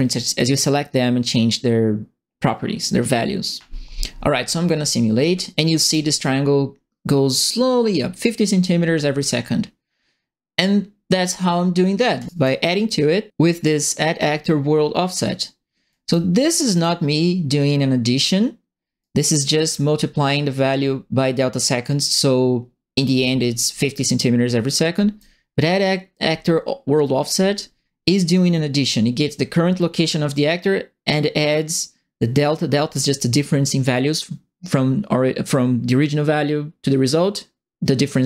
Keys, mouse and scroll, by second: 5.8 click, 12.1 click, 12.3 right click, 15.9 right click, 16.7 click, 19.0 right click, 24.9 right click.